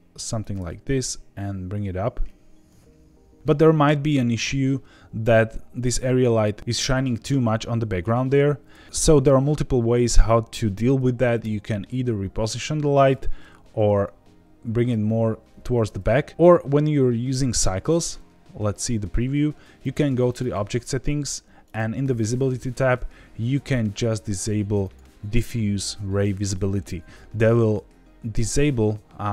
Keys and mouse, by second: 0.4 click, 0.5 g, 0.6 z, 7.5-8.0 middle drag, 8.8 KP_0, 11.4 g, 12.8 Escape, 13.4 g, 13.7 z, 13.9 z, 15.5 Escape, 17.5 z, 19.8 click, 20.3 click, 21.6 right click, 21.7 middle click, 24.8 click.